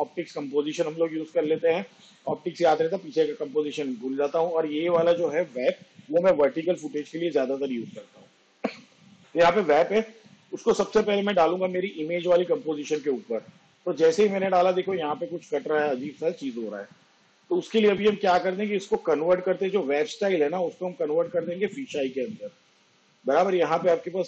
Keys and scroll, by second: 5.8 w, 6.0 a, 6.9 p.